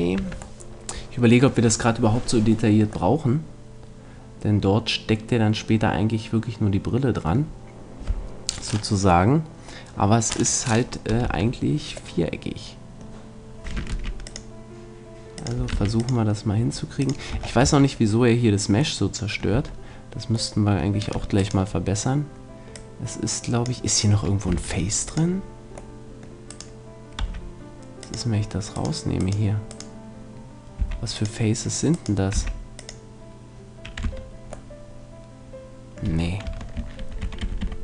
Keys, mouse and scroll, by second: 0.2 Tab, 3.8-4.9 middle drag, 11.2 Tab, 11.6-13.0 middle drag, 13.9 ctrl+r, 15.6 click, 15.7 ctrl+r, 17.3 a, 17.6 Tab, 19.5 Tab, 21.4-23.2 right drag, 22.8-24.6 drag, 24.6 ctrl+Tab, 26.0 middle click, 26.5-28.4 right drag, 27.2 x, 30.4-31.4 right drag, 30.8 x, 31.9-33.5 right drag, 32.4 x, 34.0 Tab, 36.4 Tab, 37.0 ctrl+z, 37.2 ctrl+z, 37.4 ctrl+z, 37.7 ctrl+z.